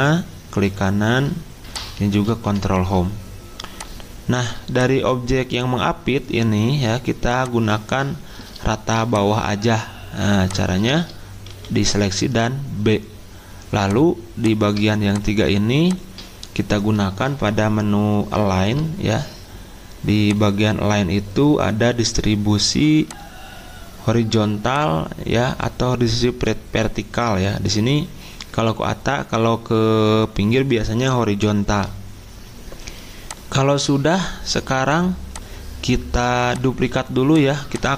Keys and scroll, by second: 2.4 ctrl+Home, 11.5 b.